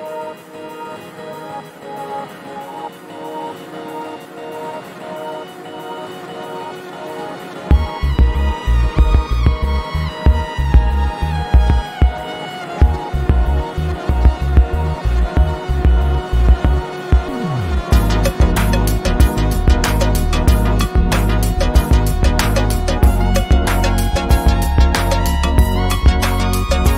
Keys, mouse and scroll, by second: 0.1 ctrl+e, 2.7 click, 4.2 Escape, 4.8-6.7 drag, 7.9 right click, 13.8 click, 16.3 ctrl+c, 17.3 click, 19.0 right click, 22.7 click, 25.5 ctrl+z, 26.7-26.9 click.